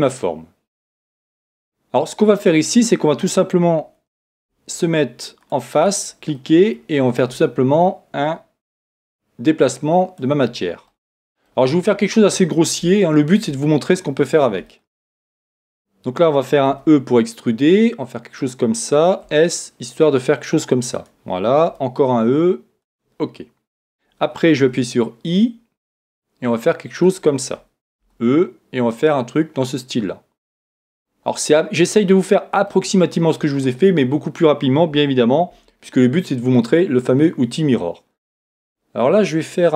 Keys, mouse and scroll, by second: 3.1-4.3 scroll up 1, 4.3 ctrl+Tab, 4.3 scroll up 1, 6.3-7.5 drag, 6.3-7.5 right drag, 7.5-8.5 middle drag, 8.5-9.0 scroll up 1, 9.0 click, 10.4-18.4 middle drag, 16.7 e, 18.5 click, 19.2 s, 21.0 click, 23.2 click, 23.2-27.0 middle drag, 24.6 i, 27.1 click, 28.1 e, 30.5 click, 30.9-35.7 middle drag, 35.5 ctrl+r.